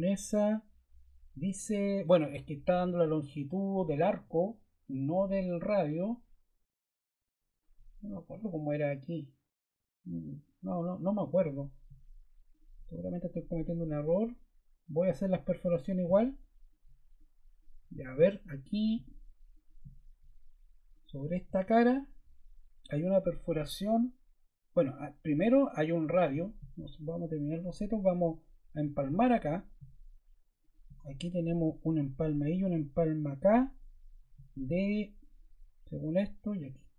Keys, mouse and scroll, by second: 4.9 click.